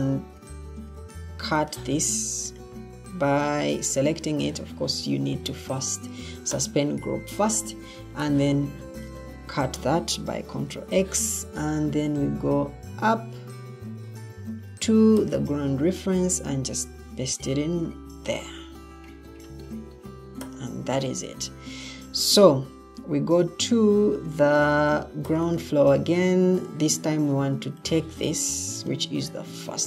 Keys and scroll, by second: 0.2 Escape, 10.6 ctrl+x, 17.6 ctrl+v.